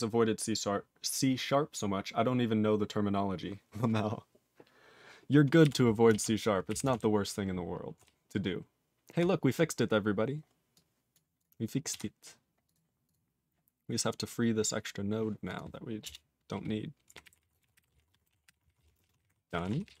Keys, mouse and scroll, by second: 12.0 q, 12.7 click, 12.7 click, 13.1 click, 13.1 click, 15.5 click, 15.6 click, 16.0 Return, 16.8-19.3 typing, 19.7 ctrl+s, 19.9 ctrl+p.